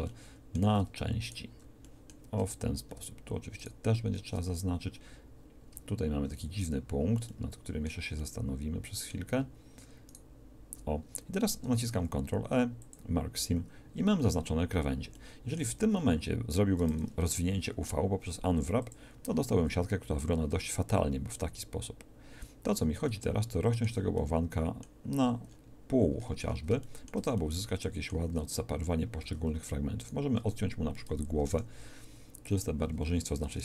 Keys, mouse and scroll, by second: 1.2-4.3 alt+shift+middle drag, 5.8 alt+shift+middle click, 10.1-11.6 drag, 11.6 ctrl+e, 15.8 a, 16.0 a, 17.3 u, 29.2 a, 30.1-31.8 drag, 31.4 ctrl+e, 32.8 a, 33.0 a.